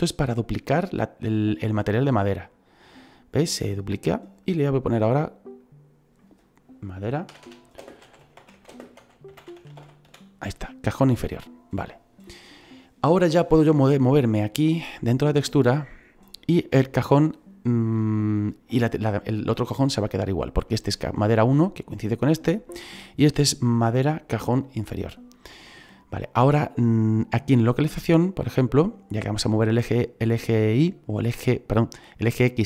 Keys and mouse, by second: 2.7 click, 4.2 click, 5.6 click, 7.2-10.0 typing, 11.4 click, 20.5 right click, 21.9 right click.